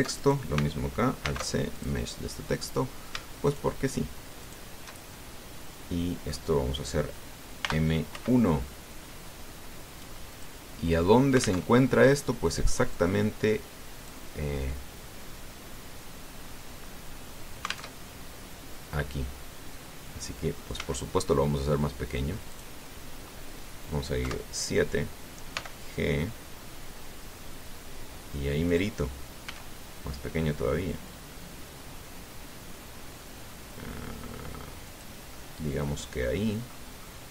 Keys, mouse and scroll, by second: 0.0 click, 0.9 alt+right click, 2.0 alt+c, 2.5 alt+click, 4.2 shift+right click, 5.2 shift+right click, 5.9-7.3 shift+middle drag, 8.4 m, 8.9 1, 11.1 click, 11.7-12.0 scroll down 2, 12.4 alt+Tab, 13.7-14.9 drag, 15.7-16.4 scroll down 4, 18.7 alt+Tab, 21.5 s, 23.3 click, 25.0 KP_7, 26.3 g, 29.5 click, 30.2 s, 35.7 click, 36.1-37.3 drag.